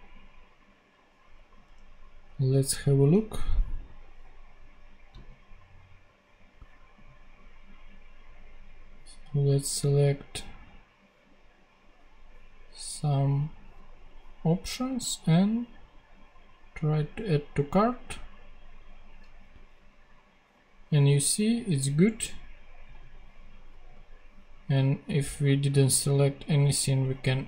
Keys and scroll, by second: 1.5 super+Tab.